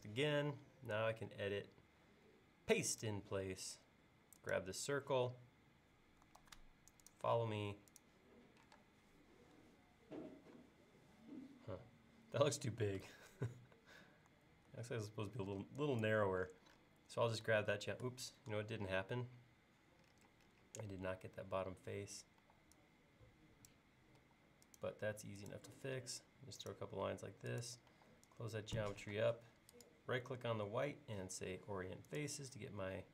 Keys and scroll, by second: 6.5 super+s, 8.8 space, 13.3 super+Tab, 14.7 super+Tab, 22.5 e, 24.2 l, 25.8 l, 28.0 e, 29.2 space.